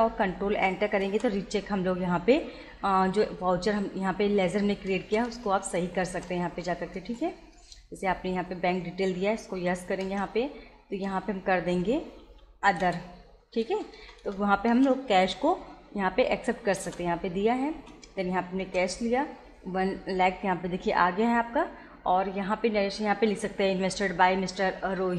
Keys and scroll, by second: 1.0 ctrl+Return, 5.1 Return, 9.6 y, 10.1 Return, 12.0 Down, 12.8 Return, 15.2 Return, 16.8 Return, 22.2 Return.